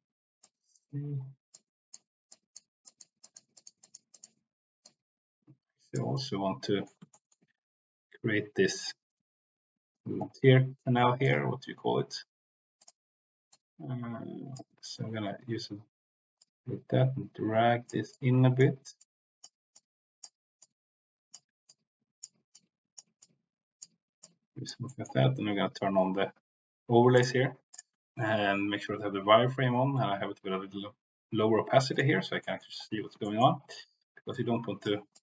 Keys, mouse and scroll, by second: 0.3 click, 1.5 click, 2.2 click, 2.8 click, 3.1 click, 3.5 click, 3.8 click, 4.1 click, 4.8-5.9 drag, 6.2 middle click, 7.1 shift+middle click, 11.2 click, 12.7 click, 13.5-14.5 drag, 16.3-17.8 drag, 18.0 click, 18.9 click, 19.6 click, 20.6 click, 21.6 click, 22.4 click, 23.1 click, 24.1 click, 24.9 middle click, 27.0 click, 27.7-32.0 drag, 32.4 middle click, 33.2 shift+middle click, 34.3 click, 35.1 click.